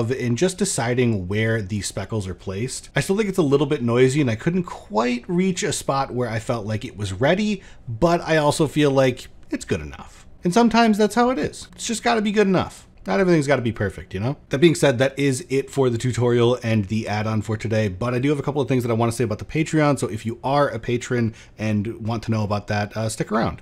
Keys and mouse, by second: 11.6 click, 12.8 click.